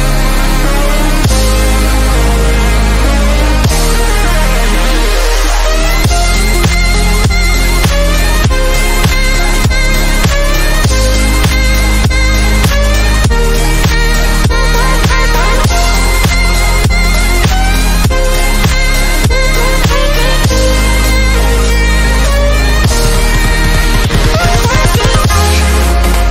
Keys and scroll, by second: 12.6-16.0 typing, 17.9 BackSpace, 18.0 p, 18.2 Return.